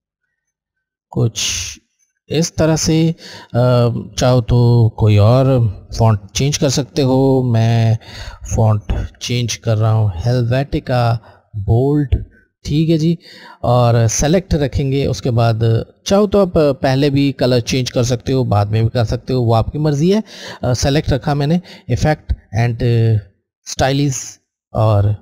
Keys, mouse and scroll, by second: 4.4 click, 4.5 click, 8.5 typing, 11.4 click, 21.5 click.